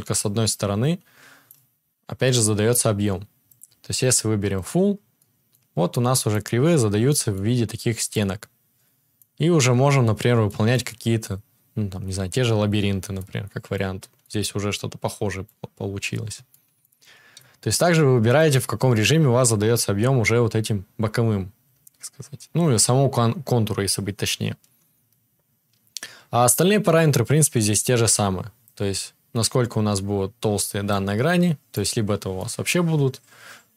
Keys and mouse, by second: 3.6-33.7 drag.